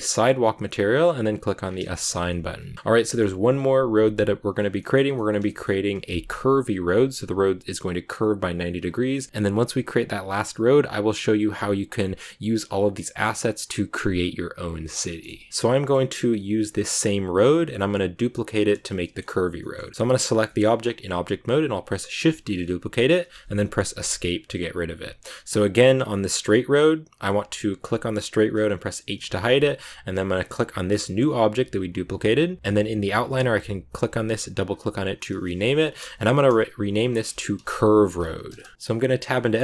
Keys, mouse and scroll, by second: 1.2 click, 1.5 scroll down 4, 1.7 shift+middle click, 2.0 Tab, 2.2-3.4 middle drag, 3.4-4.9 scroll up 1, 4.9-5.5 scroll up 1, 5.5-6.5 scroll up 1, 9.3-11.2 shift+middle drag, 15.0 middle click, 15.5 right click, 17.7-18.9 drag, 18.9-22.1 middle drag, 19.5 scroll up 1, 22.1 shift+d, 26.2 click, 29.0 h, 30.0 right click, 33.1 click, 33.2-36.4 drag, 38.7-39.6 middle drag.